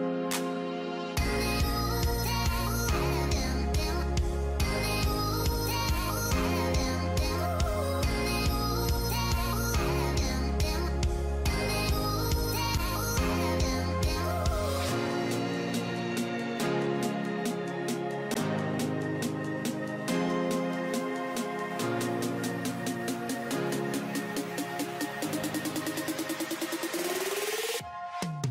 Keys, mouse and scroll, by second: 0.6-1.2 scroll down 2, 1.4-2.0 alt+scroll down 1, 2.2 alt+scroll up 1, 7.3 alt+scroll down 1, 7.8-8.6 alt+scroll up 1, 10.7-11.0 alt+scroll down 1, 12.1 alt+\, 12.7 scroll down 1, 16.7-17.4 alt+scroll up 1, 23.6 ctrl+i, 23.6-24.0 alt+scroll down 1.